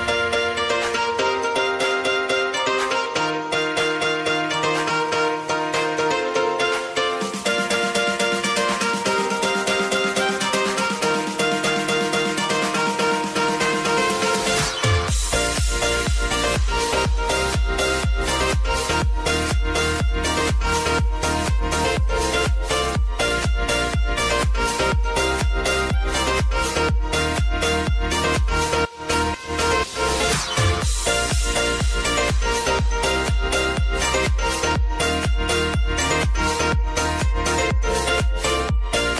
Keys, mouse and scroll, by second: 2.4 [, 3.5 shift+click, 5.1 alt+[, 6.6 click, 7.4 [, 7.9 space, 9.2 -, 13.8 space, 14.7 click, 17.9 click, 19.9-21.7 typing, 22.5 ctrl+a, 23.2 click, 23.8-25.0 typing, 25.8 click, 30.2 Return, 30.7 shift+g, 31.1 shift+r, 32.0 ctrl+a, 33.7-37.7 drag.